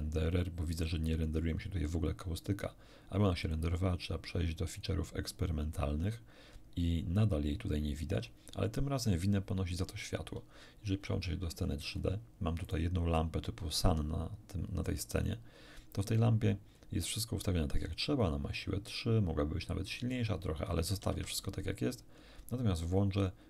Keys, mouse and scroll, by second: 3.4 click, 4.7 click, 10.9 shift+F5, 11.5-12.1 shift+scroll down 1, 12.7 click, 15.3 click, 16.5-16.9 scroll down 1, 18.9-21.5 drag, 21.1 Escape.